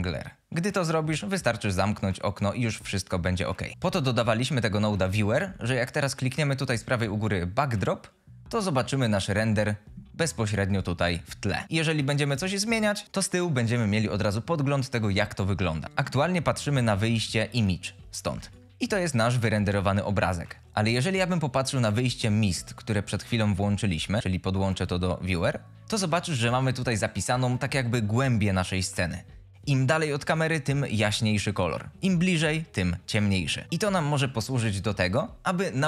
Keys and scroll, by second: 1.4 F22, 18.6 Escape.